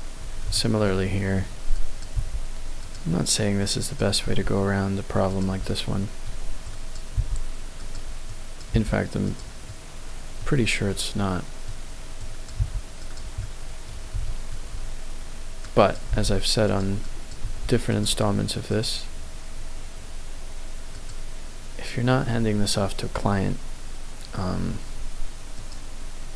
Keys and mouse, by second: 0.4 shift+middle click, 1.8 click, 2.2 g, 2.8-4.1 drag, 4.3 g, 5.6 middle click, 6.6 click, 7.1 g, 7.8 click, 8.2 click, 8.8 g, 9.2 click, 9.7 middle click, 10.9 middle click, 12.3 click, 12.6 g, 13.0 click, 13.4 middle click, 14.2 click, 15.6 click, 16.1 g, 17.0 click, 17.4 g.